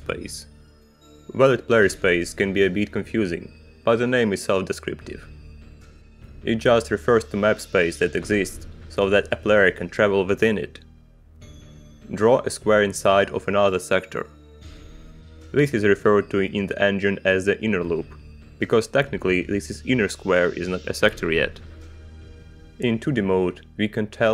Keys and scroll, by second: 11.2 shift+g, 13.9 space.